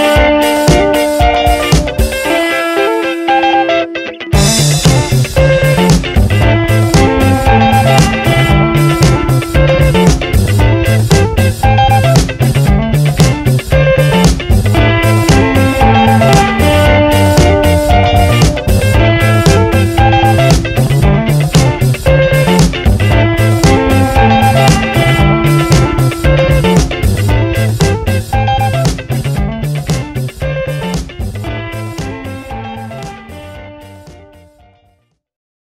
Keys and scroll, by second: 0.0-2.3 typing, 3.7 space, 3.9 -, 3.9 space, 5.1-6.6 typing, 7.6 ctrl+Return, 8.1 v, 8.3 Right, 10.4 ctrl+t, 19.0 Return, 21.4 ctrl+t, 22.7 Return, 32.1 Return, 33.6 ctrl+t.